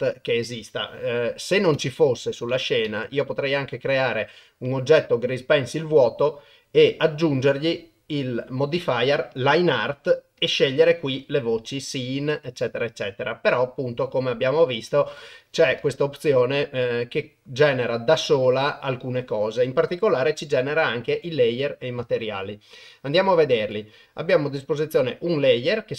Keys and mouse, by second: 1.8 Delete, 2.9 shift+a, 6.0-9.4 drag, 10.5-11.3 drag, 15.8 shift+a.